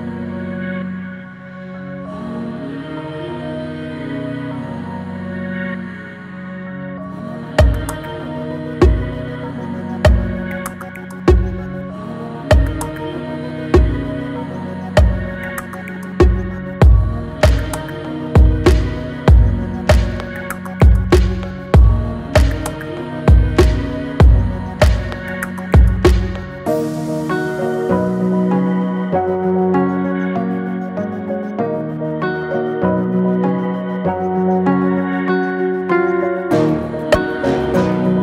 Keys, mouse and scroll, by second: 0.5 alt+click, 1.4 click, 1.8 alt+click, 2.8-3.5 scroll down 1, 3.5 alt+middle click, 4.0-4.4 scroll up 1, 4.7 alt+x, 5.3 click, 7.1 x, 8.9 Tab, 9.1 scroll down 1, 9.4-10.0 middle drag, 10.0 Tab, 10.3 Tab, 11.0 alt+z, 11.3-12.9 right drag, 12.9 click, 13.8 Tab, 14.2 alt+click, 15.2 click, 15.9 alt+click, 16.3 middle click, 17.3 alt+shift+click, 18.2 ctrl+b, 21.7 Tab, 22.0-24.0 middle drag, 24.4 click, 25.9-29.2 drag, 29.2 Tab, 29.6 Tab, 29.8 drag, 30.0-30.9 middle drag, 30.9 scroll up 3, 31.6 alt+middle click, 32.2 shift+middle drag, 32.5 scroll down 1, 32.8 Tab, 33.7 alt+z, 34.6 click, 37.3 drag.